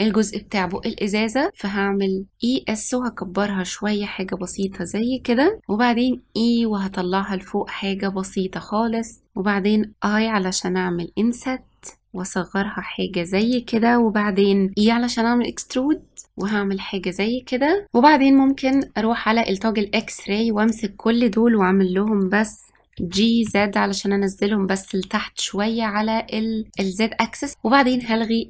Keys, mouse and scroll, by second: 0.6 e, 9.9 i, 14.7 e, 18.6-20.0 drag, 22.9 g, 27.8-28.4 drag.